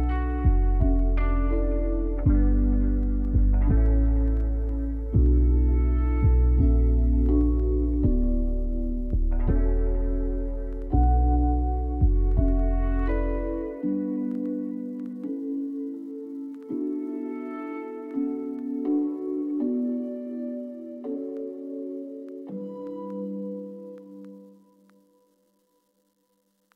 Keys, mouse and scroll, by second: 0.8-5.2 drag, 5.2-12.0 scroll up 1, 12.0 scroll up 1.